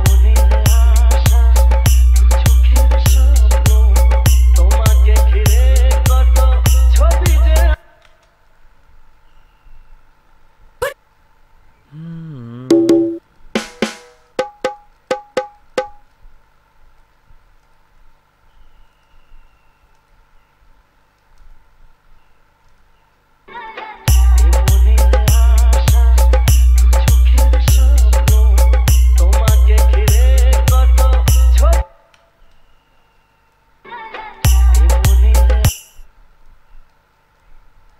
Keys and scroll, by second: 7.9 space, 23.7 space, 31.9 space, 34.1 space, 35.9 space.